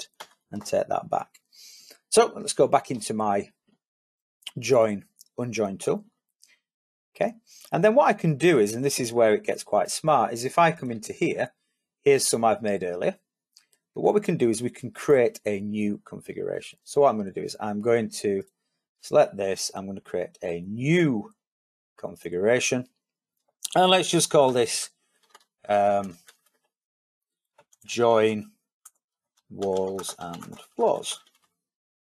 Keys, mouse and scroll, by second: 5.7 click.